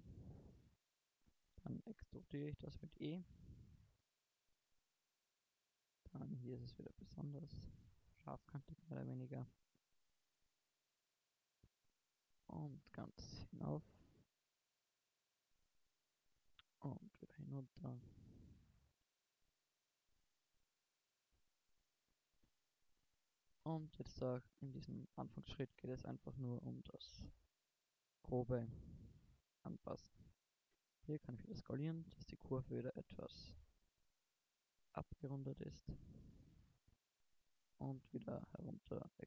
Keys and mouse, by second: 2.9-4.5 drag, 3.3 e, 4.7 e, 6.6 s, 9.3 e, 11.2 click, 12.5 e, 12.8 click, 14.0 middle click, 15.4 middle click, 16.6 e, 17.6 middle click, 18.8-20.0 drag, 21.0 e, 25.0 e, 26.9 e, 28.7 s, 33.0-35.0 drag, 36.4 middle click, 37.7 e.